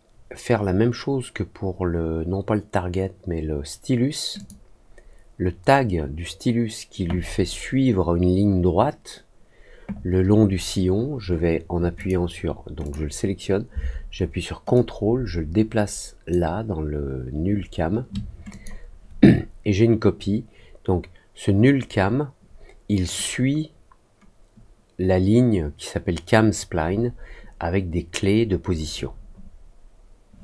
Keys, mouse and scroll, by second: 4.3 click, 11.9 click, 12.8 click, 14.7-16.2 ctrl+drag, 18.4 click.